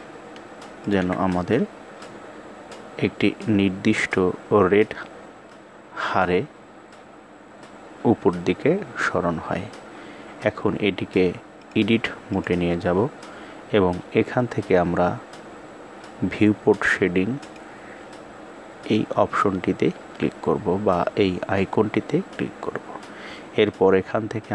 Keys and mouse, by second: 11.1-12.0 drag, 17.0 click.